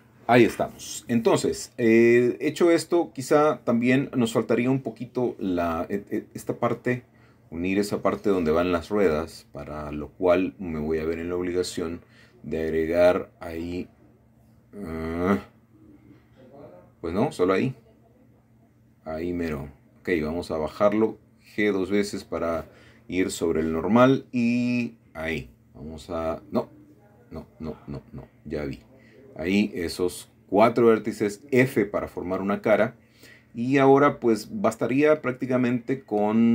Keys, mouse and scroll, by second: 0.3 middle click, 0.4 typing, 0.8 scroll down 1, 0.9 scroll up 1, 1.6-7.4 typing, 1.9 shift+middle click, 2.9 scroll up 1, 3.0 middle click, 3.6-5.0 shift+middle drag, 6.2 middle click, 7.4 middle click, 7.9-8.5 scroll down 2, 8.5 middle click, 8.8-9.5 typing, 9.7 middle click, 10.6 middle click, 10.9-11.4 scroll up 1, 11.4 typing, 12.0 ctrl+r, 16.0 Escape, 17.3 ctrl+r, 17.7 click, 19.6 click, 20.6 g, 20.7 g, 22.8 click, 24.0 ctrl+r, 24.7 click, 26.1 ctrl+z, 28.1 click, 29.7 shift+click, 30.5 shift+click, 30.7 shift+click, 31.4 f, 32.3 scroll down 1, 32.7 middle click, 33.9 middle click, 34.5 click.